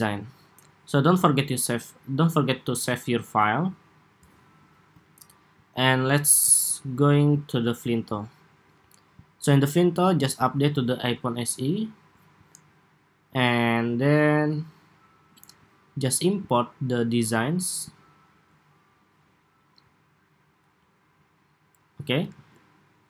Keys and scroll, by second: 22.0 super+s.